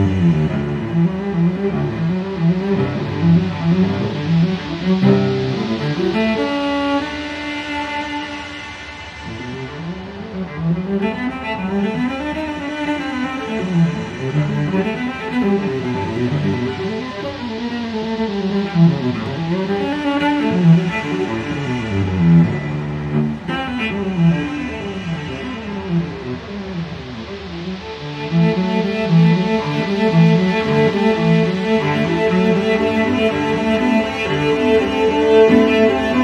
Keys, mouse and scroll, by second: 0.5 5, 1.1 0, 2.1 click, 4.2 click, 5.6 click, 6.6 2, 8.0 click, 9.0 3, 10.0 0, 11.4 click, 12.5 click, 13.4-13.8 scroll down 1, 18.0 click, 19.5 click, 21.5 click, 22.9 click, 25.6 click, 26.5 3, 26.9 0, 27.7 click, 28.6 2, 29.3 click, 31.4 click, 33.2 ctrl+click, 35.5 ctrl+click.